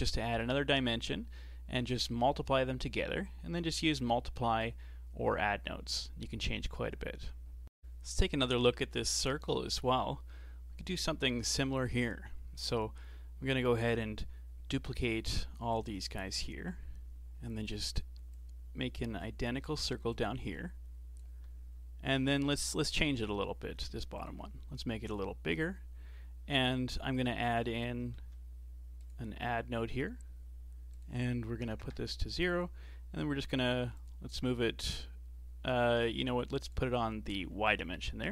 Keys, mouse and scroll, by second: 4.6-7.7 drag, 12.6 click, 14.9 shift+d, 16.7 click, 18.3-21.6 drag, 21.6-22.1 scroll down 1, 22.1-23.3 middle drag, 23.3-24.2 scroll up 2, 24.2 ctrl+shift+click, 25.1 click, 27.5 click, 28.2 shift+d, 30.9-34.6 drag, 36.3 click, 37.7-38.3 alt+drag.